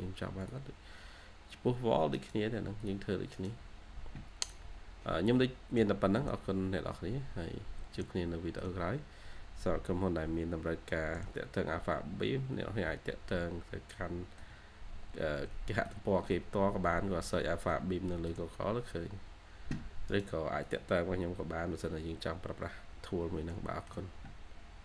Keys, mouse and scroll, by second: 2.0 right click, 3.2 right click, 5.2 middle click, 6.9-7.4 scroll up 1, 7.9 middle click, 11.0 middle click, 15.0-15.3 scroll up 1, 15.4 shift+middle click, 16.8 scroll down 1, 17.1 middle click, 18.3-19.3 shift+scroll down 1, 20.0 right click, 21.9-22.9 scroll down 1, 23.4 middle click, 23.8-24.8 shift+scroll down 1.